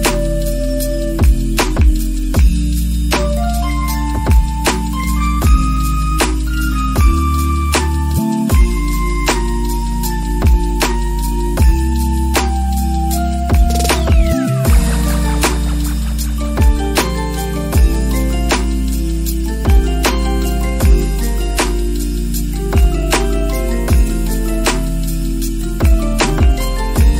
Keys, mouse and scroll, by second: 1.3 shift+middle click, 1.5 click, 2.3 shift+middle click, 3.2 middle click, 4.3 right click, 5.0 click, 5.4 click, 5.9 click, 7.7 middle click, 8.5 middle click, 8.9 middle click, 9.6 middle click, 10.9 click, 11.4 click, 11.9 middle click, 12.2 click, 12.5 middle click, 12.9 click, 13.0 middle click, 13.1 click, 13.2 middle click, 13.4 middle click, 13.7 click, 14.0 middle click, 14.1 click, 14.5 middle click, 14.8 middle click, 14.9 g, 15.6 middle click, 15.8 Tab, 15.9 middle click, 16.4 Tab, 16.5 middle click, 16.6 click, 17.7 s, 17.9 middle click, 18.2 ctrl+z, 18.4 middle click, 18.6 click, 20.0 middle click, 20.4 KP_Add, 22.0 middle click, 22.5 KP_Add, 23.4 middle click, 23.9 g, 26.2 KP_0, 26.8 F12.